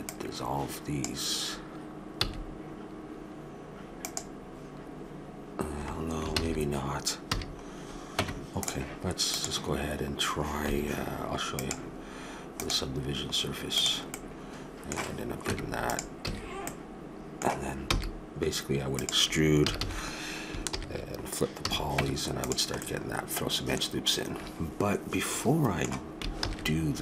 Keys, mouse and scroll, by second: 2.7 x, 6.3 ctrl+z, 7.3 a, 8.2 Tab, 9.3-11.1 drag, 11.1 middle click, 11.6-13.4 drag, 13.4 middle click, 13.8 click, 14.1-15.4 middle drag, 15.4 Tab, 16.2 a, 16.9-17.9 middle drag, 17.9 e, 19.6 a, 19.9 a, 20.7 ctrl+n, 21.6 a, 22.0 Tab, 22.8-24.2 middle drag, 26.4 ctrl+z.